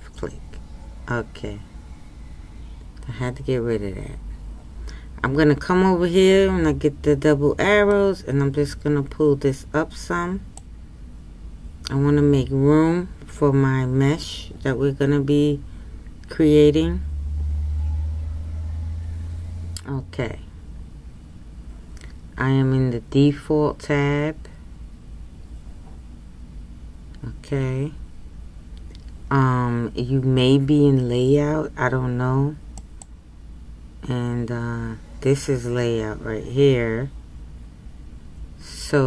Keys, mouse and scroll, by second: 7.9-11.1 drag, 32.9-39.0 drag.